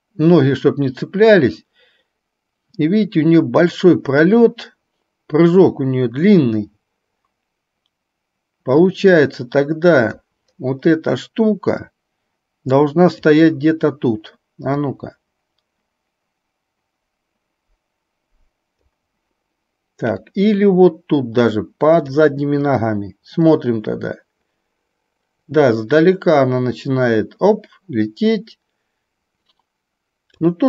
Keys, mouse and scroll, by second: 12.1-13.4 drag, 14.9-19.1 drag, 20.4-22.3 drag, 23.7-30.4 drag.